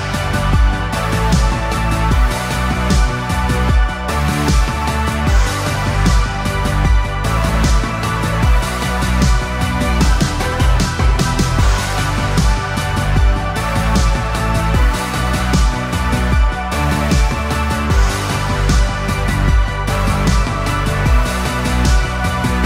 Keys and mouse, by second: 0.4 KP_3, 1.7 c, 3.8 g, 6.9 a, 7.1 a, 8.1 c, 12.1 c, 18.4 g.